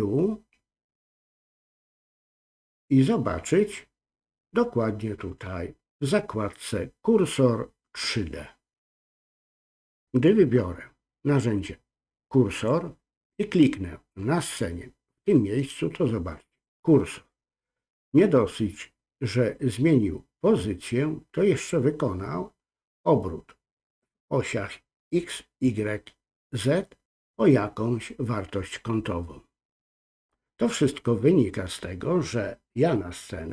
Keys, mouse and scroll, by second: 12.5 click, 14.4 click.